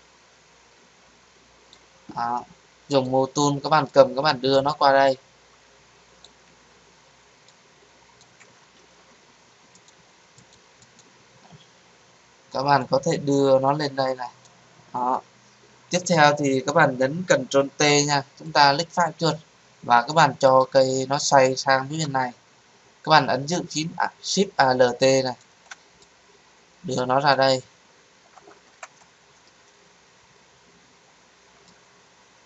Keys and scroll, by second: 8.7 ctrl+z, 17.6 ctrl+t.